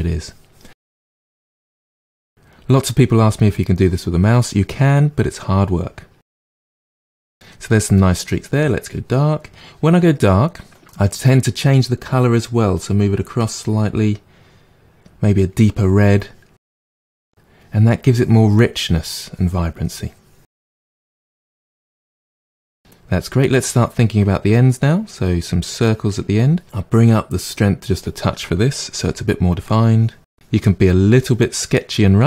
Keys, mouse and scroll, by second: 0.8 middle click, 1.3-2.6 drag, 2.6 middle click, 3.1-4.5 drag, 4.8 click, 5.6 middle click, 6.3 click, 6.7 middle click, 7.1 click, 7.3-8.9 middle drag, 8.9 click, 12.5-15.5 drag, 16.5-17.6 drag, 17.6 middle click, 18.0-19.1 drag, 19.1 middle click, 19.5 click, 19.9 middle click, 20.2 click, 20.8 middle click, 21.1 click, 21.7 middle click, 22.1 click, 22.3-24.6 middle drag, 24.6-26.6 drag, 27.1-29.0 drag, 29.0 f, 29.9-32.2 drag.